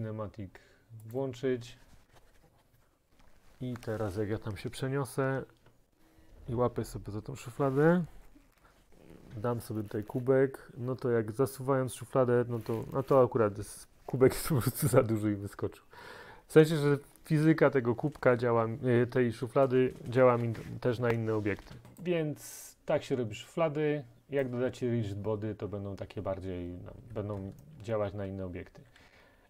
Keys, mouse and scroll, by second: 1.2-2.9 drag, 22.1 click, 24.5 middle click, 25.7 scroll, 28.0-29.4 typing.